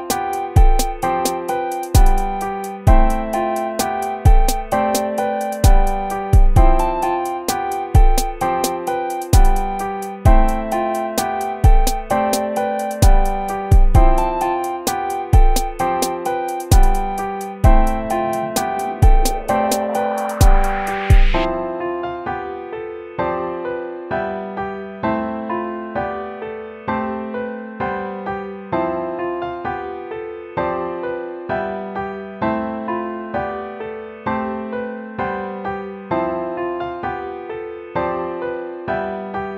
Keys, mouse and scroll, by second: 2.3 right click, 5.5 right click, 7.6 right click, 8.1 BackSpace, 9.0 right click, 9.2 ctrl+z, 10.5 right click, 10.9 right click, 27.0 ctrl++, 28.1 right click, 30.0 BackSpace, 31.2-33.3 typing, 32.2 ctrl++, 33.0 ctrl++, 33.6 ctrl+-, 33.8 ctrl+-, 34.3-35.6 typing, 37.2 BackSpace.